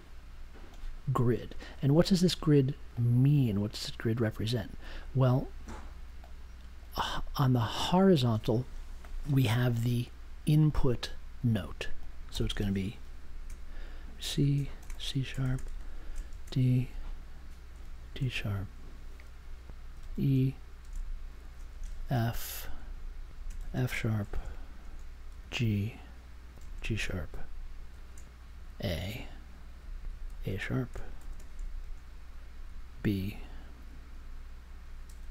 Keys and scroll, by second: 14.0-16.8 typing, 17.9 shift+3, 19.9 shift+e, 20.8 space, 21.9 shift+f, 22.7 space, 23.3 space, 23.5 shift+f, 25.2 space, 25.4 shift+f, 26.5 shift+g, 27.9 shift+3, 28.6 shift+a, 29.7 space, 30.2 shift+a, 31.4 space, 32.9 shift+b.